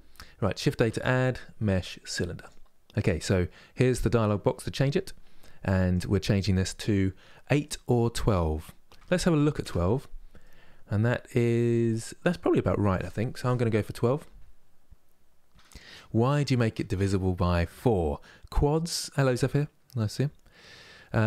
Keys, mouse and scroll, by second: 0.6 shift+a, 3.9-10.1 drag, 10.1-13.2 middle drag.